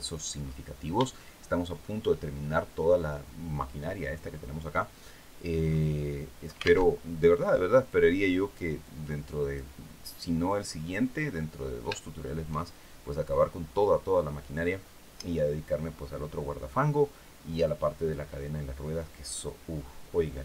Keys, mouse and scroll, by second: 0.0-0.4 scroll down 2, 0.8 shift+middle click, 5.3 scroll up 2, 6.5 alt+Tab, 7.0 scroll down 1, 7.5 click, 8.5 click, 10.2-10.9 scroll down 1.